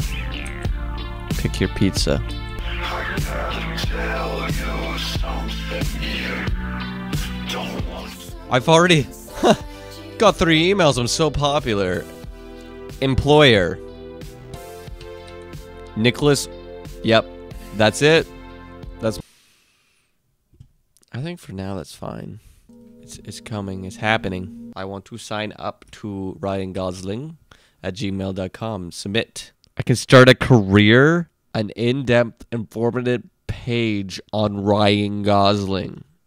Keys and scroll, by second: 0.5 Down, 12.1 super+c, 15.4 super+v, 26.9 super+v.